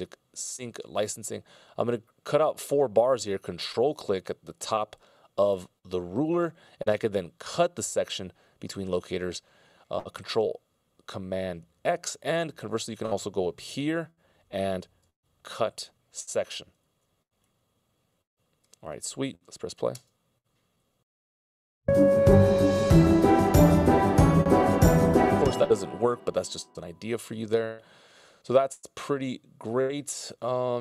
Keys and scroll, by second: 15.2 ctrl+alt+super+m, 19.3 c, 20.4 space, 23.9 space, 24.6 super+z.